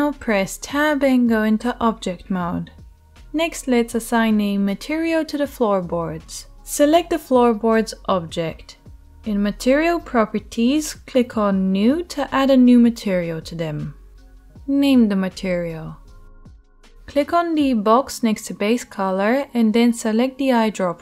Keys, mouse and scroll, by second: 0.9-10.3 middle drag, 3.2 right click, 10.2 click, 10.2-21.0 right drag, 12.6 click, 12.6 middle click, 13.5-20.4 drag, 13.5-20.4 middle drag.